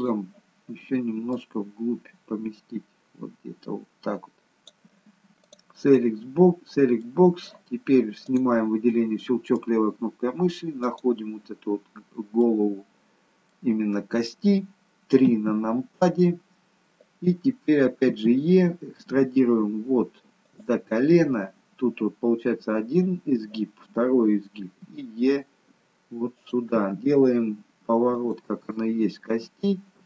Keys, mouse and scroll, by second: 0.0 click, 1.4 click, 5.4 click, 6.0 middle click, 8.3 click, 8.9 middle click, 10.9 click, 12.1-12.7 scroll up 2, 12.5 middle click, 15.3 KP_3, 18.1 e, 25.0 e, 26.8 e, 28.7-29.8 scroll down 2.